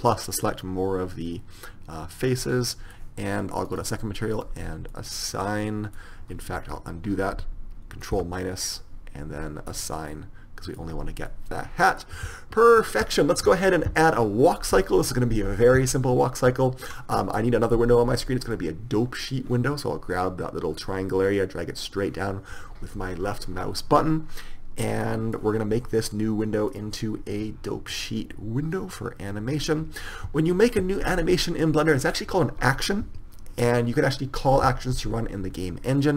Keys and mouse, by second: 2.4 middle click, 3.9 click, 4.7-6.5 middle drag, 6.8 ctrl+z, 8.3 ctrl+KP_Subtract, 11.0 Tab, 12.2-13.1 middle drag, 18.7 click, 19.5 click, 25.2-26.9 drag, 30.0-31.8 drag, 31.8-36.1 middle drag.